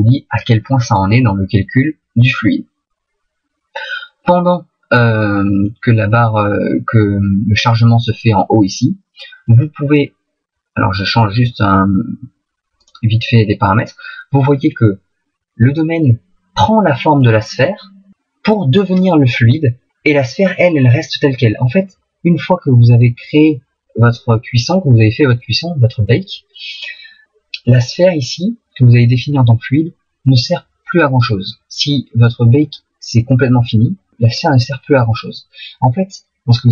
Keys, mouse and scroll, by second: 11.0 click, 27.8 right click.